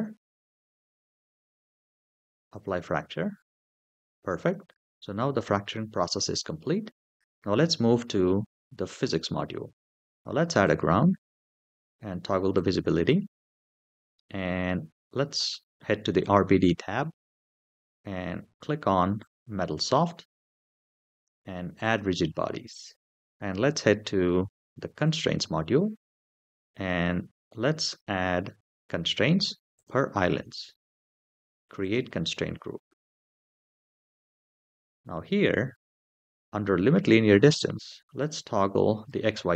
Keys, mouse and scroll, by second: 2.3 click, 4.5 shift+middle click, 8.8 click, 10.4 click, 12.3 click, 16.0 click, 16.9 scroll down 2, 17.6-19.0 scroll down 1, 19.0 click, 20.4 scroll down 3, 21.6 click, 23.1 shift+middle click, 24.8 click, 27.2-27.9 scroll down 3, 29.5 click, 31.6 click, 33.8 scroll down 2, 34.4-34.7 scroll down 2, 35.8 click, 38.0 click.